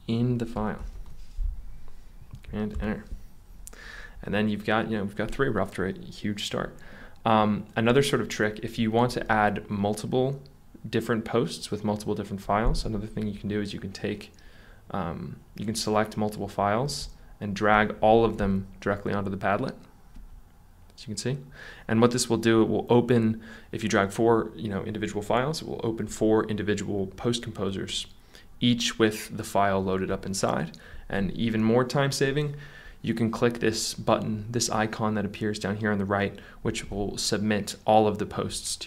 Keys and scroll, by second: 0.6 BackSpace, 0.9 shift+g, 2.7 super+Return.